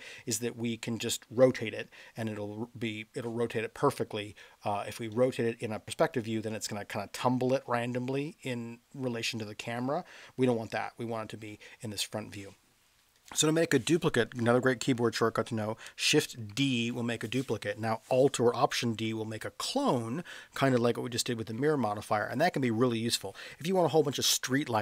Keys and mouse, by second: 5.1-5.6 middle drag, 10.8 KP_1, 16.5 shift+d.